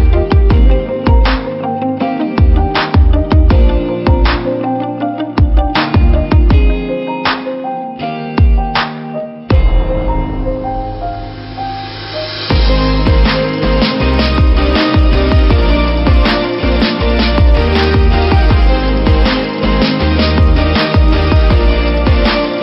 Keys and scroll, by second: 1.8 Return, 3.4 ctrl+t, 4.8 alt+shift+Return, 11.3 v, 13.1 ctrl+t, 17.0 Return.